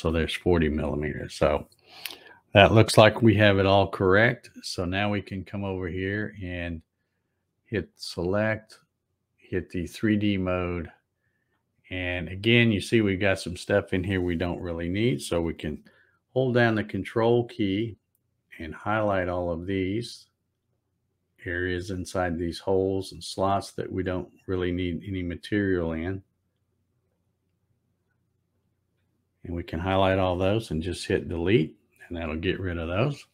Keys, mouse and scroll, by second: 8.0 click, 10.1 click, 19.2 ctrl+click, 20.8 ctrl+click, 22.1 ctrl+click, 23.2 ctrl+click, 24.6 ctrl+click, 25.7 ctrl+click, 27.2 ctrl+click, 28.6 ctrl+click.